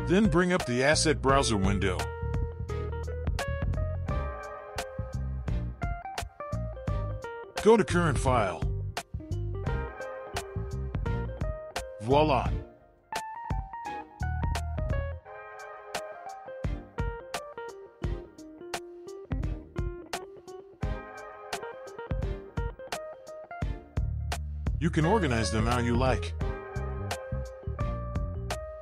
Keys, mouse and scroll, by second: 1.7-6.9 drag, 8.3-11.7 drag, 14.6-17.7 drag, 22.1 click, 23.7 click, 24.4-26.5 drag, 26.5 o.